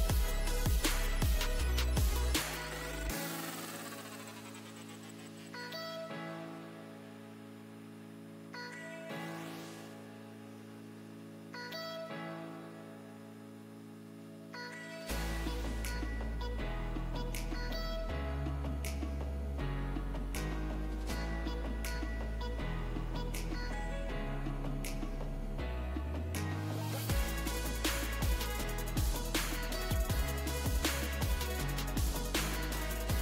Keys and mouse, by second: 0.2-1.7 drag, 1.0 z, 1.7 z, 5.4 z, 7.5 z, 8.2-10.3 drag, 10.6 ctrl+r, 12.7 s, 15.8-20.7 drag, 17.2 s, 21.4 s, 23.4 Tab, 29.8-31.7 right drag.